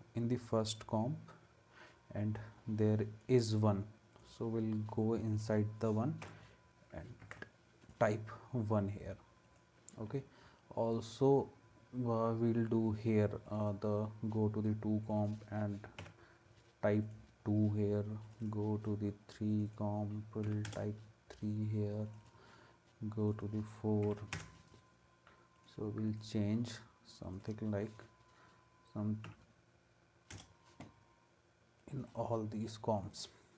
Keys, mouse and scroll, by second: 6.2 1, 7.2 ctrl+s, 16.0 2, 20.4 3, 20.7 Return, 24.0 4, 24.3 Return, 29.2 5, 30.3 Return.